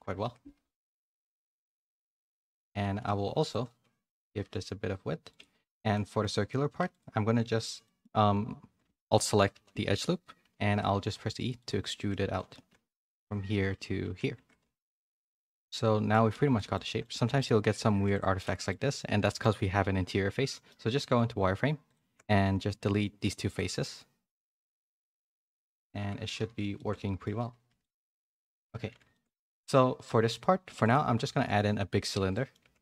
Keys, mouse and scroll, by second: 0.2 Tab, 0.5 1, 1.0 KP_3, 2.3 z, 2.6 a, 2.8 a, 3.2 b, 4.3 s, 5.5 z, 5.9 middle click, 6.3 3, 6.9 alt+click, 7.8 middle click, 9.5 KP_3, 10.4 e, 11.9 shift+middle click, 14.0 z, 14.4 Tab, 14.6 a, 14.8 a, 14.9 middle click, 15.7 middle click, 16.3 Tab, 16.5 middle click, 16.8 shift+middle click, 17.1 z, 17.9 3, 18.1 click, 18.4 middle click, 18.7 z, 19.2 middle click, 20.4 middle click, 20.8 z, 22.3 x, 25.4 middle click, 25.7 z, 26.0 Tab, 26.2 a, 26.4 a, 26.7 shift+middle click, 27.6 a, 27.8 middle click, 28.7 a, 29.1 shift+middle click, 29.4 middle click, 30.8 click, 31.2 shift+a, 32.1 Tab, 32.3 middle click, 32.6 2.